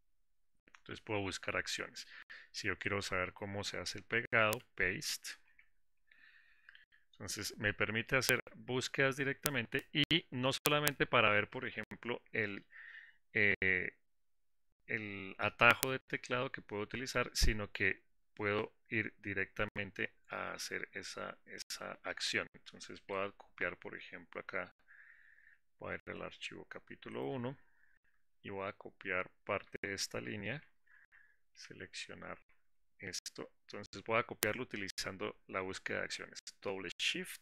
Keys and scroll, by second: 20.7 ctrl+f, 20.7 ctrl+b, 31.2 ctrl+alt+w.